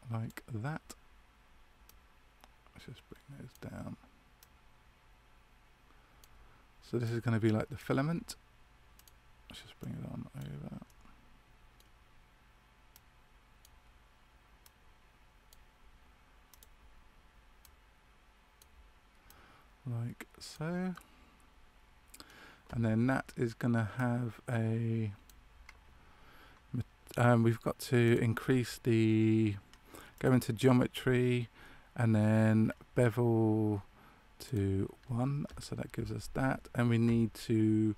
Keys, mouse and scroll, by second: 1.8 right click, 9.7 click, 10.8 middle click, 12.9 right click, 16.4 click, 17.6 right click, 20.9 middle click, 28.0 click, 32.5-33.1 scroll down 1, 33.1 scroll down 3, 34.4 click.